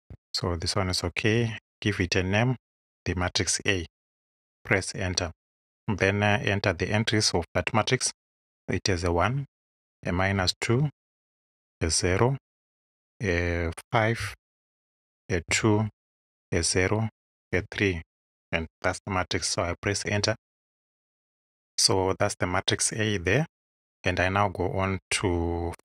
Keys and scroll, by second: 1.8 shift+a, 4.6 Home, 8.9 1, 9.3 Tab, 10.0 -, 10.4 2, 10.8 Tab, 12.1 Tab, 14.2 5, 14.5 Tab, 15.5 2, 15.8 Tab, 17.6 3, 20.1 Home.